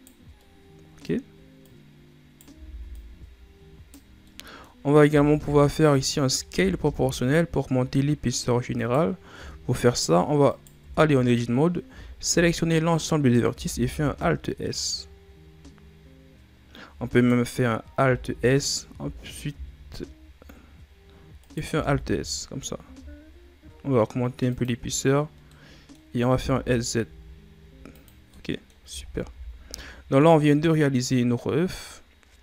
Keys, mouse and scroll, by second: 0.3-1.5 middle drag, 1.5 right click, 2.6 ctrl+z, 2.9 right click, 4.0 scroll down 2, 4.2 middle click, 4.8 scroll up 1, 5.0 a, 5.3 a, 6.0 middle click, 6.5 alt+s, 9.3 Tab, 10.4 right click, 10.8 Tab, 11.8 a, 12.2 a, 13.6 alt+s, 18.9 alt+shift+s, 25.4 middle click, 26.2 s, 28.3 middle click, 28.8 Tab, 29.0 scroll down 4, 29.2 a, 29.7-32.2 middle drag, 32.2 scroll up 3.